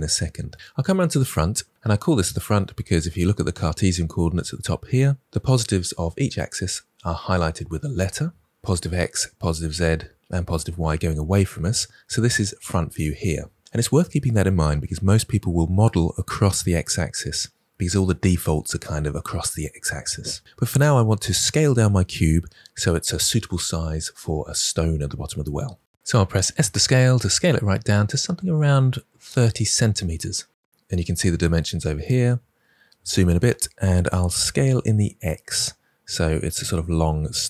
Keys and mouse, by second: 26.3 s, 27.2 click, 34.4 s, 34.8 x.